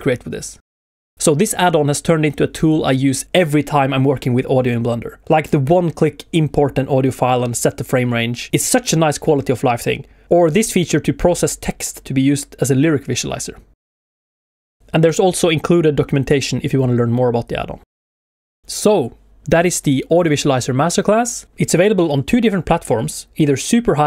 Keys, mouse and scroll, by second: 9.9 shift+middle click, 10.7 click, 11.6 scroll down 1, 12.0 shift+middle click.